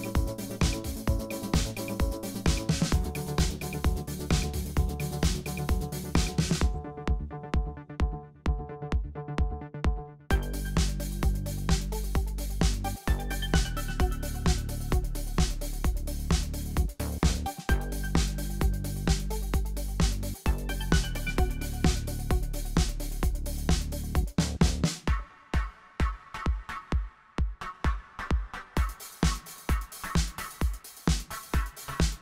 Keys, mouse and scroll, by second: 3.5 click, 4.9 g, 6.8 KP_4, 7.1 KP_7, 8.0 g, 8.8 KP_1, 9.2-10.6 middle drag, 10.6 click, 11.0 click, 12.4 click, 13.1 click, 13.5 click, 13.8 Tab, 14.6-15.1 scroll down 1, 15.1 scroll down 1, 15.2 click, 15.5 click, 16.3 KP_1, 16.6 scroll up 5, 17.0 shift+middle click, 17.8 click, 20.7 click, 21.1 click, 21.7 Tab, 21.9 click, 22.5 click, 24.0 click, 24.6 scroll up 2, 25.7 click, 26.2 click, 27.4 click, 28.1 Tab, 29.3 click, 30.2-31.7 drag, 31.9 click.